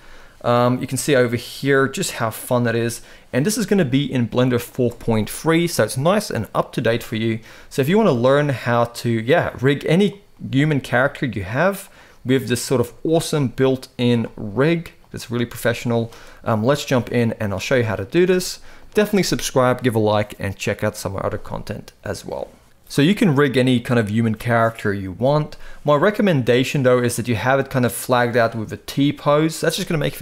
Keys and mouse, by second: 0.6 g, 2.0 middle drag, 2.4 r, 3.2-3.6 middle drag, 7.1-7.4 shift+middle drag, 7.6-8.1 middle drag, 9.6 click, 10.0 middle drag, 10.4 g, 12.1 click, 12.5 middle click, 12.9 r, 13.9-14.2 middle drag, 15.0 r, 15.9-16.3 middle drag, 16.5 r, 17.3 middle click, 17.8 r, 21.4-22.5 middle drag, 25.5-26.1 middle drag, 27.4-27.8 middle drag, 28.7 click.